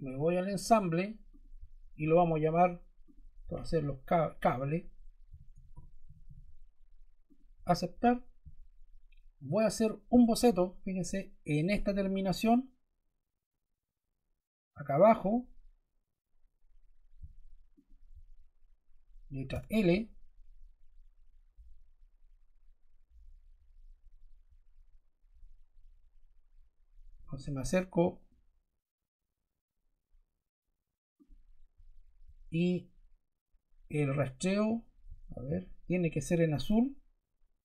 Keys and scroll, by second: 5.0-6.6 typing, 19.5 l.